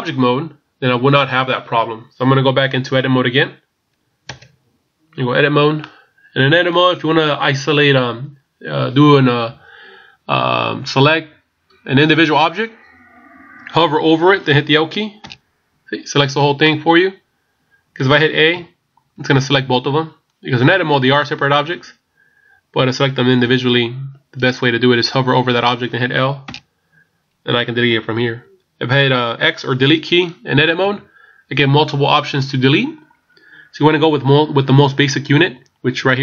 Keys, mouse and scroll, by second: 0.6-3.8 scroll down 1, 4.5 Tab, 5.8 middle click, 15.3 l, 16.6 middle click, 18.6 a, 23.4 a, 26.4 l, 30.8 x.